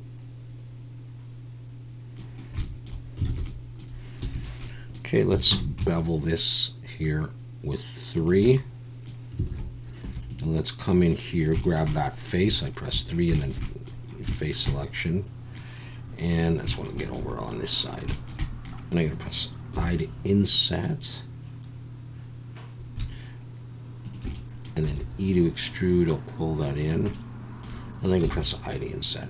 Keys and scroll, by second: 3.3 alt+a, 4.2 3, 5.5 ctrl+b, 9.5 alt+a, 10.0 3, 19.7 i, 24.8 e, 28.2 i.